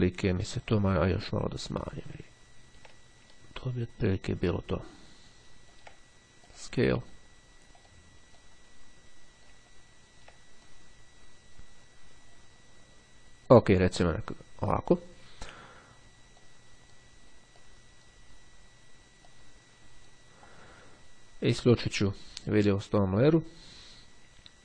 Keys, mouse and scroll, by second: 1.9 click, 2.4-3.0 ctrl+scroll down 2, 4.2-6.3 drag, 6.5 click, 7.8 click, 9.8-10.3 ctrl+scroll up 2, 10.7-14.1 ctrl+drag, 16.3-17.5 drag, 17.7 click, 19.4-20.7 drag, 22.2-24.0 drag.